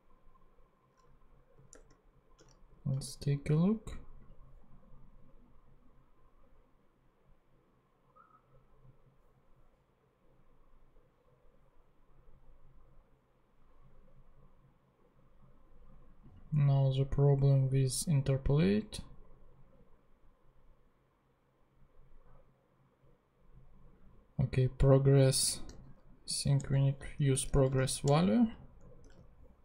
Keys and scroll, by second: 1.7 super+Tab, 3.3 ctrl+super+z, 25.7 ,, 26.6 BackSpace, 27.3 ., 27.6 a, 28.0 Return, 29.0 super+Tab.